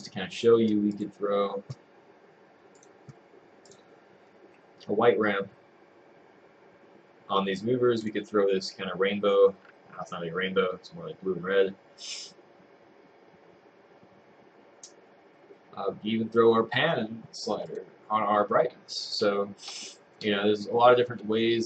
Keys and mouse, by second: 1.2 click.